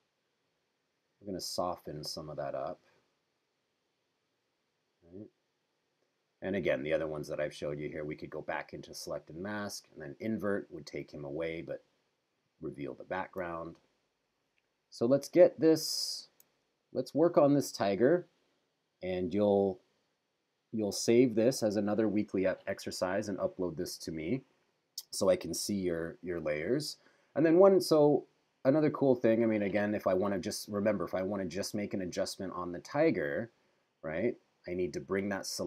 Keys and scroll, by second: 13.6 super+-, 16.6 super+=.